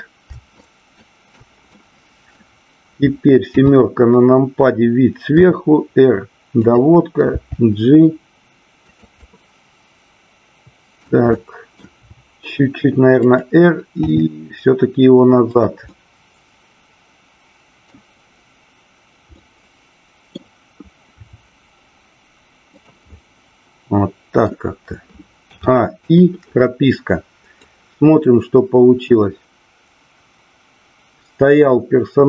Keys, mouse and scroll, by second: 0.5 shift+click, 1.6 middle click, 3.4 KP_7, 5.4 r, 7.3 g, 8.9 click, 9.1-11.0 middle drag, 11.4 middle click, 12.0 r, 13.3 click, 14.0 g, 15.5 click, 15.9-17.9 middle drag, 15.9 scroll up 1, 19.4-20.4 middle drag, 22.7 drag, 22.7 r, 23.0-24.4 middle drag, 27.6-32.2 drag.